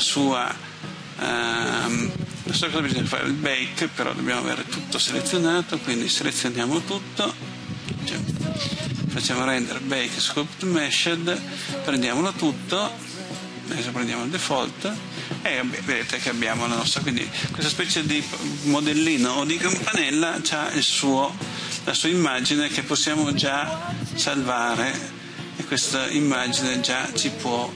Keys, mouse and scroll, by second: 5.3-5.8 typing, 7.4 typing, 9.0-27.7 drag.